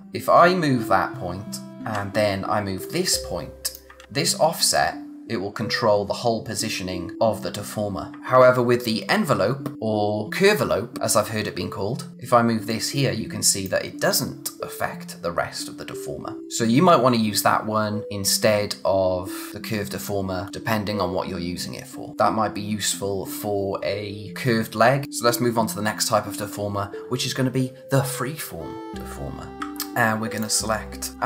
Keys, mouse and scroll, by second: 0.0 click, 1.8 z, 2.8 click, 4.0 z, 4.7 click, 8.1 click, 12.1 z, 12.7 click, 25.0 click, 30.3 click.